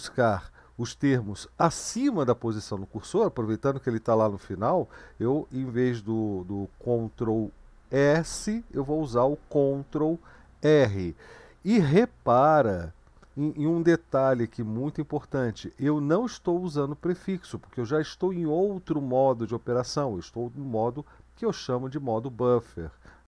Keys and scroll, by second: 10.4 ctrl+r.